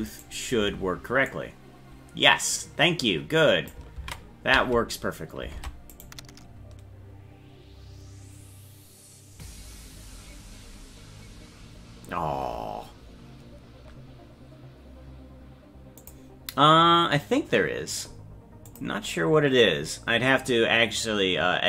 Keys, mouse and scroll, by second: 0.2 right click, 1.3-3.8 drag, 4.1 ctrl+z, 5.6 ctrl+Tab, 5.9 right click.